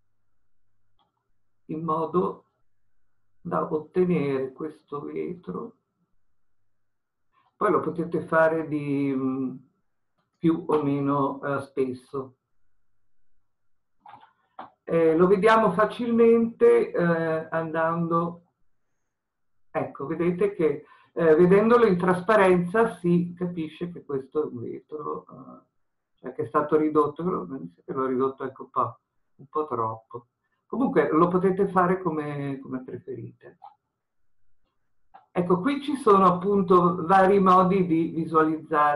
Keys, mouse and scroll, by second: 1.0 e, 12.2-18.8 middle drag, 18.8-20.3 drag, 20.3-21.3 scroll down 2, 23.7-38.9 middle drag.